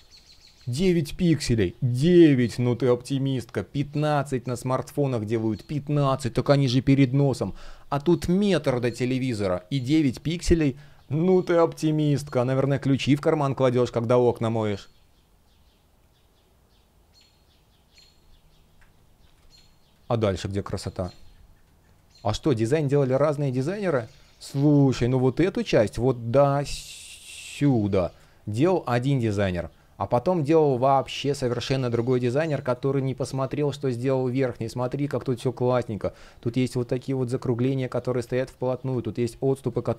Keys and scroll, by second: 19.1 space, 23.8 space, 24.8 shift+p, 27.9 space, 29.0 space, 30.8 space, 33.1 space, 37.9 super+z, 39.2 space.